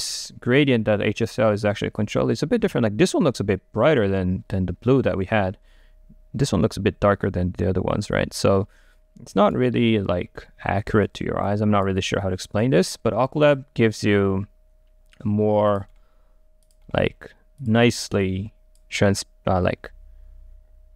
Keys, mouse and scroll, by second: 8.2-11.5 right drag, 11.5-14.8 drag, 15.8 click, 16.0-18.3 middle drag, 18.3-19.8 drag, 19.8-20.9 right drag.